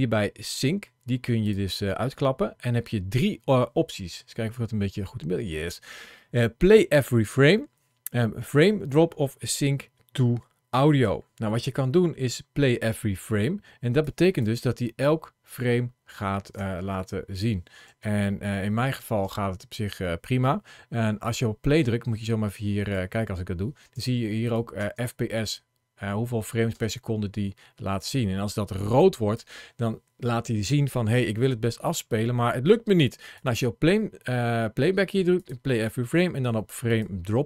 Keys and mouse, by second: 17.0 space, 17.7 space, 19.0 space, 20.9 ctrl+shift+a, 24.6 space, 26.5 space, 27.8-29.2 drag, 33.2-37.1 drag.